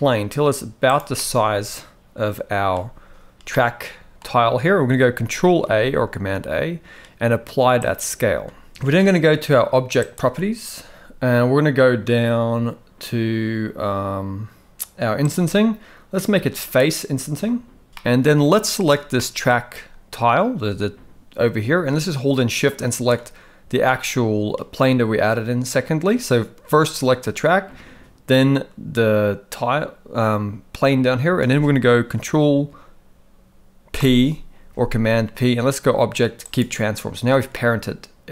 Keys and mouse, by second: 1.2-2.7 middle drag, 3.5-4.2 middle drag, 5.6 ctrl+a, 10.0 click, 15.3 click, 17.9 g, 17.9 middle click, 18.8 click, 19.2 middle click, 34.0 ctrl+p, 37.6-38.3 middle drag.